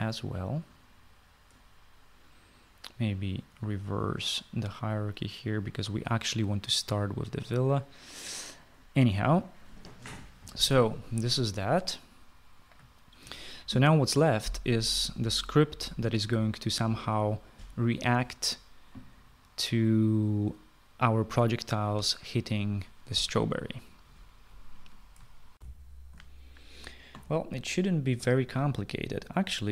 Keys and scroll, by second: 14.2 ctrl+s, 26.6 shift+F9, 28.5 shift+F9.